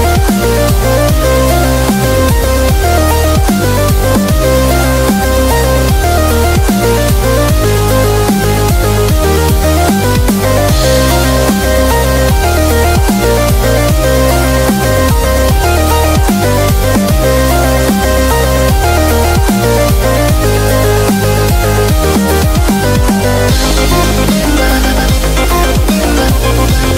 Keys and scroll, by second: 0.1 super+-, 0.3 super+-, 6.5 super+-, 7.0 super+-, 9.8 super+g, 11.6-13.0 typing.